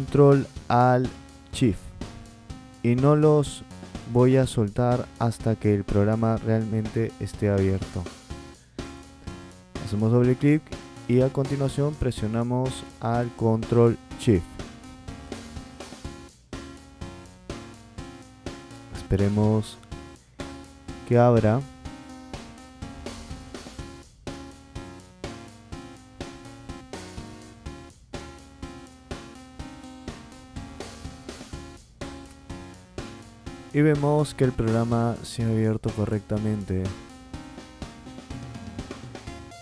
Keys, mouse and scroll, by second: 15.2 click, 15.4 click, 39.5 click.